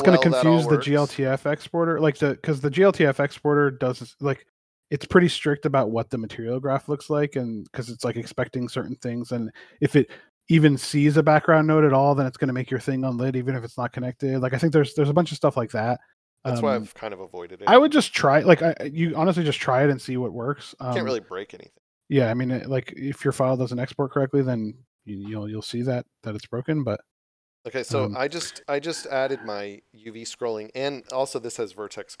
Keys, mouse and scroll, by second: 0.0 x, 0.6 click, 2.5 scroll down 1, 5.6 click, 8.1 click, 12.9 click, 27.0 click, 31.7 click.